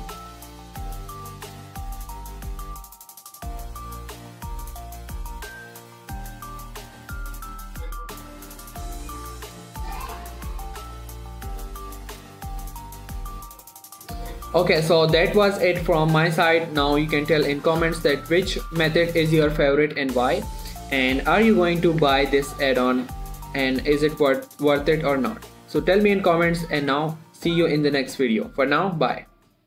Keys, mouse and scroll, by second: 0.1 click, 0.3 g, 1.4 right click, 2.0 click, 2.3 g, 2.9 right click, 3.1-3.8 scroll down 1, 3.8 click, 4.1 g, 4.7 right click, 5.3 click, 5.5 g, 5.9 right click, 6.2 click, 6.3 g, 7.0 right click, 7.5 click, 7.8 g, 8.6 right click, 9.0-9.4 scroll down 1, 9.4 click, 9.6 g, 9.9 right click, 10.2 click, 10.4 g, 10.7 right click, 10.9 scroll down 3, 11.1 shift+middle drag, 11.3-11.7 shift+scroll up 3, 11.7 click, 12.4 g, 14.3-16.4 right drag, 21.1-21.5 scroll down 1, 21.5 Tab.